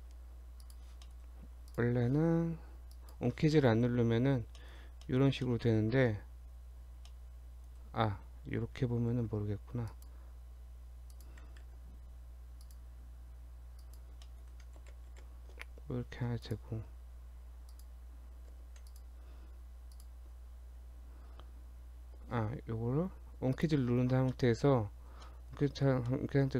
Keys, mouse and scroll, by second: 0.6 click, 1.1 middle click, 1.3 Tab, 1.7 click, 2.9 click, 3.6 middle click, 4.0 Tab, 4.3 scroll up 2, 4.6 shift+middle click, 5.1 middle click, 5.5 middle click, 6.0 Tab, 6.4 Tab, 7.1 middle click, 9.1 ctrl+r, 11.7 ctrl+r, 14.3 middle click, 14.8 ctrl+z, 15.1 ctrl+z, 16.3 Tab, 16.5 click, 16.9 Tab, 17.7 click, 18.5 2, 18.9 alt+click, 19.9 alt+shift+click, 23.6 click, 24.3 middle click, 24.5-25.3 scroll up 2, 25.3 middle click, 26.0 scroll down 1, 26.1 middle click.